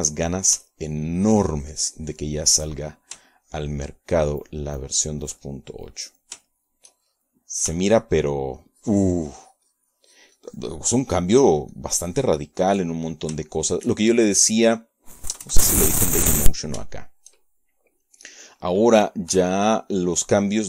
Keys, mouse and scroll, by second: 1.5 middle click, 1.6 shift+click, 2.6 middle click, 2.7-4.5 shift+drag, 4.9 shift+click, 5.6-7.6 shift+drag, 8.0 click, 8.7 shift+click, 9.3 shift+click, 9.3 shift+middle click, 10.0 shift+click, 10.7-15.0 shift+drag, 15.1 shift+click, 15.1-16.1 shift+middle drag, 16.3 shift+middle click, 17.5 KP_Add, 17.5 middle click, 18.4 click, 18.9 shift+middle click, 19.1 shift+click, 20.1 click.